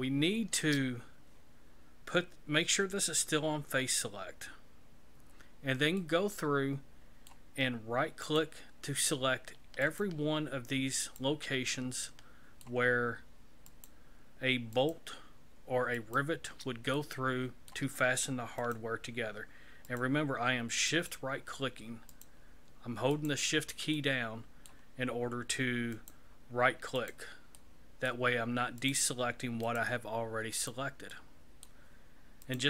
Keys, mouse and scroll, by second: 6.0 middle click, 8.2 right click, 9.8 shift+right click, 11.0 right click, 11.7 shift+middle click, 13.7 shift+right click, 14.7 shift+right click, 15.9 shift+right click, 16.9 middle click, 18.6 shift+right click, 19.9 shift+right click, 20.9 shift+right click, 22.1 shift+right click, 23.1 shift+right click, 23.9 shift+middle click, 25.9 shift+right click, 27.5 shift+right click, 27.5 shift+middle click, 28.8 shift+right click, 29.6 shift+right click, 30.5 shift+right click, 31.1 shift+middle click, 32.4 shift+right click.